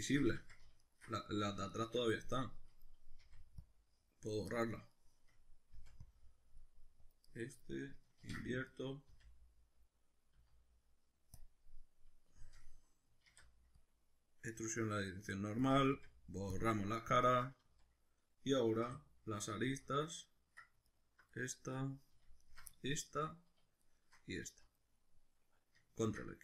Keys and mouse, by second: 0.4 ctrl+z, 0.9 alt+shift+right click, 1.7 alt+shift+right click, 2.3-4.6 middle drag, 3.2 c, 4.6 right click, 4.9 shift+middle click, 5.7 c, 7.4 right click, 7.6 middle click, 8.2 ctrl+i, 9.1 x, 9.8-15.7 middle drag, 10.3 z, 13.3 alt+e, 15.7 click, 15.9 x, 17.3-20.9 ctrl+middle drag, 17.6 z, 18.9 2, 19.7 z, 20.9 alt+right click, 21.3-22.4 middle drag, 22.4 alt+shift+right click, 22.7-23.9 shift+middle drag, 23.9 alt+shift+right click, 24.5 z, 24.8-26.4 middle drag, 26.1 ctrl+x.